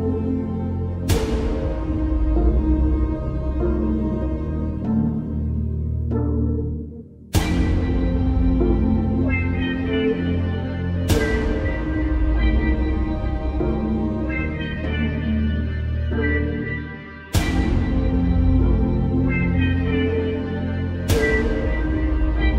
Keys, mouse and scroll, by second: 0.3 click, 1.7 Return, 2.8 click, 6.2 ctrl+z, 7.5 click, 9.0 space, 9.1 click, 11.9 space, 12.1 click, 12.4-13.0 space, 14.1 click, 16.0 ctrl+z, 16.9 click, 17.9-18.2 alt+scroll down 1, 18.6 space, 18.7-19.3 click, 19.1 space, 19.5 alt+scroll up 1, 20.8 click, 21.5 alt+scroll down 1, 21.8 click.